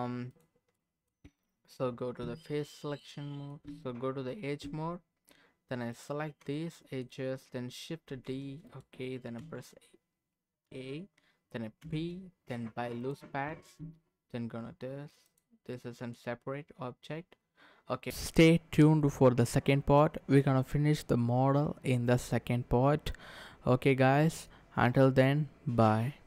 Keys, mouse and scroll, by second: 0.3 click, 0.7 middle click, 1.2 Tab, 3.0 middle click, 3.7 Tab, 5.9 alt+click, 6.5 middle click, 8.1 shift+d, 8.7 right click, 9.4 a, 9.4 a, 11.8 p, 13.4 Tab, 15.2 click, 15.7 middle click, 19.6 KP_0, 20.4-21.6 scroll down 1, 21.6 middle click.